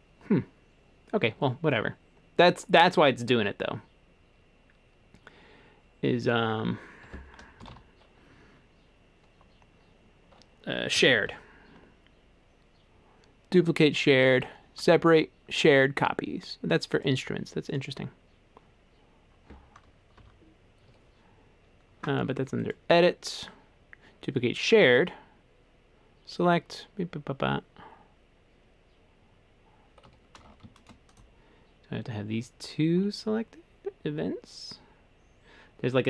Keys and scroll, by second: 7.1 Escape, 7.7 super+k, 10.8-11.7 typing, 13.9 typing, 20.2 BackSpace, 20.9 Escape, 30.1 Escape.